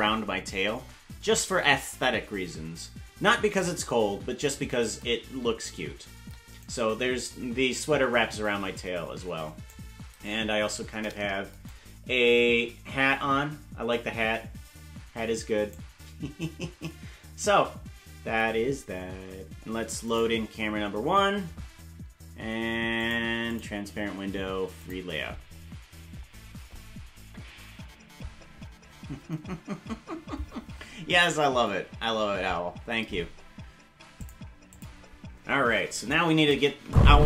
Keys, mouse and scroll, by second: 36.2 click, 36.8 space.